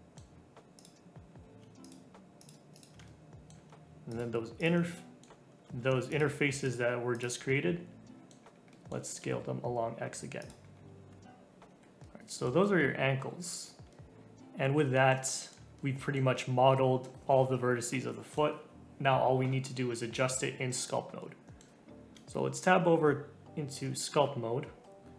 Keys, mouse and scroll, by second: 0.7 click, 1.8 shift+click, 2.4 shift+click, 2.7 shift+click, 3.0-4.1 middle drag, 4.1 shift+click, 4.6 shift+click, 4.8 middle click, 5.6 ctrl+z, 6.1 shift+click, 6.6 shift+click, 7.1 shift+click, 7.4 middle click, 8.4-8.7 scroll down 3, 8.7 middle click, 9.0 s, 10.6 scroll down 2, 11.1 a, 11.5 ctrl+Tab, 11.7-12.0 scroll up 1, 12.0 middle click, 12.6-13.3 scroll up 2, 13.3 scroll down 2, 13.9-20.5 middle drag, 20.5-21.2 scroll up 1, 21.2 middle click, 22.1 ctrl+Tab.